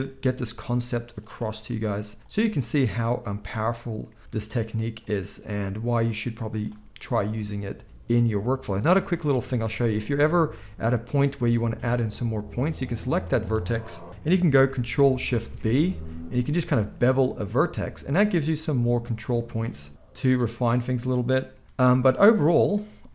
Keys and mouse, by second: 0.2 e, 1.6 ctrl+a, 2.5-5.1 drag, 3.3 ctrl+s, 4.2 ctrl+a, 5.1-6.4 middle drag, 5.5 g, 6.4-9.1 drag, 6.8 g, 9.1-12.5 middle drag, 12.5-17.7 drag, 15.3 ctrl+shift+b, 17.7-23.1 middle drag, 18.7 g, 19.6 g, 21.6 ctrl+a, 22.0 z.